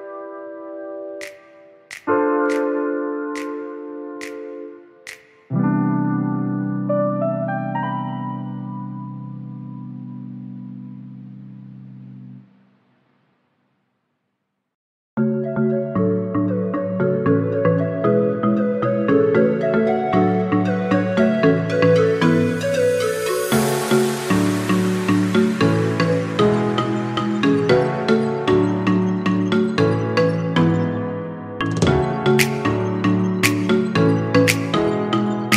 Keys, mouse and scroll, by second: 2.5 click, 4.4 shift+d, 5.7 drag, 8.2 r, 16.4-18.2 drag, 18.2 0, 20.0 click, 21.3-23.8 drag, 26.5 click, 28.2-29.2 drag, 30.4 click, 32.8 click.